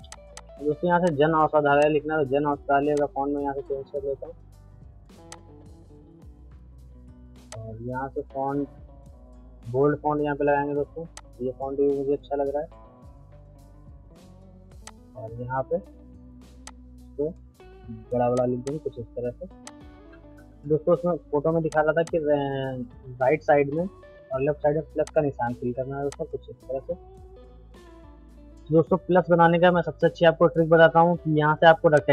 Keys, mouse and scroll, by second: 0.2 c, 0.4 click, 5.3 click, 7.5 click, 11.1-18.3 drag, 18.5 shift+c, 18.6 click, 19.9 Up, 21.7 shift+click, 21.9 c, 22.0 click, 25.0 click, 26.8 Down, 32.0 click.